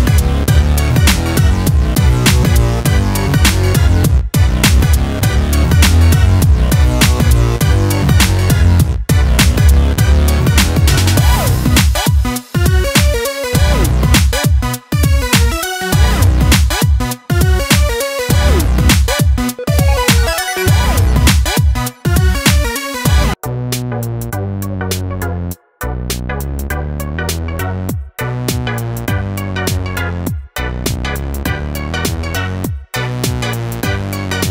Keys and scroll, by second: 4.3 ctrl+t, 12.5 ctrl+space, 13.0-19.3 ctrl+space.